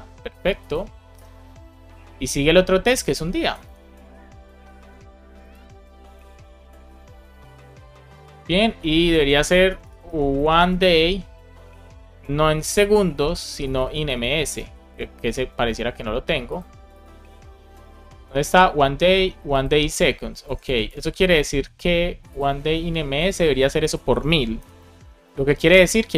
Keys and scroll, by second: 1.0 BackSpace, 1.3 super+s, 3.5 super+c, 6.0 Return, 6.3 super+v, 7.5 super+s, 9.6 BackSpace, 13.0 Return, 13.5 BackSpace, 14.1 BackSpace, 14.6 shift+m, 15.1 shift+s, 20.0 shift+super+Left, 20.3 super+c, 20.5 Right, 20.7 Return, 20.9 super+v, 24.2-25.2 typing, 25.2 super+s.